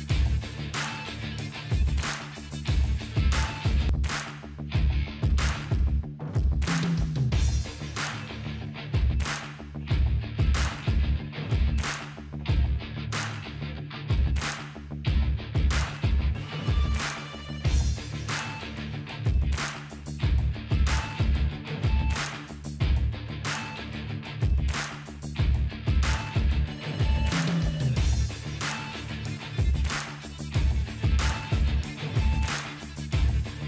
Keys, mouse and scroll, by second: 12.5 Down, 24.8-26.8 drag.